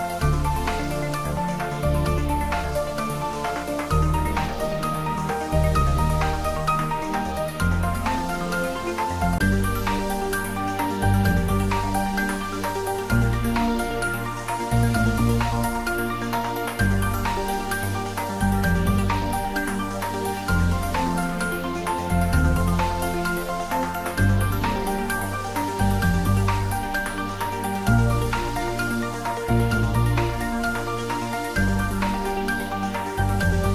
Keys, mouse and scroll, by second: 1.3-5.5 middle drag, 5.5-6.9 scroll up 1, 6.9-9.7 middle drag, 12.2-16.3 middle drag, 18.6 click, 25.5 click, 30.6-31.9 scroll down 1, 31.9 scroll up 1.